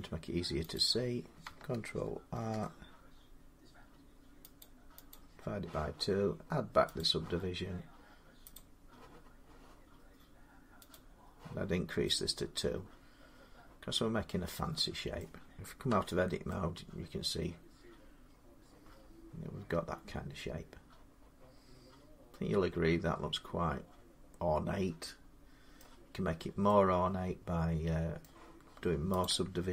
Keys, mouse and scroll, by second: 0.6 click, 2.1 ctrl+r, 3.4 scroll, 4.4 click, 4.9 click, 5.2 middle click, 6.8 click, 8.4 click, 10.8 click, 11.5 middle click, 11.6 middle click, 12.4 scroll down 1, 14.1 scroll down 1, 15.0 middle click, 15.7 Tab, 17.5-20.1 middle drag, 25.6-27.3 middle drag, 26.1 Tab, 28.0 scroll, 29.0 click.